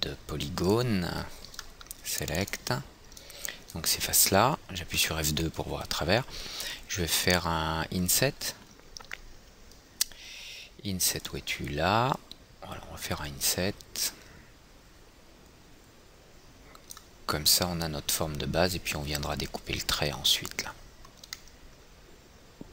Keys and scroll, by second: 5.4 F2.